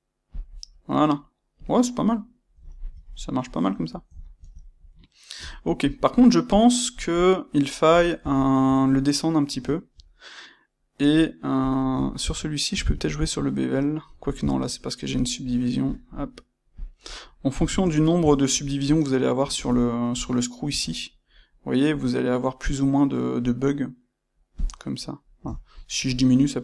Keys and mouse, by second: 0.3 click, 0.7 middle click, 2.6-11.6 ctrl+middle drag, 11.6 click, 11.7-15.8 ctrl+middle drag, 15.8-17.2 drag, 17.2-18.8 middle drag, 18.8 click, 19.4 space, 24.6 click, 24.9-26.6 middle drag.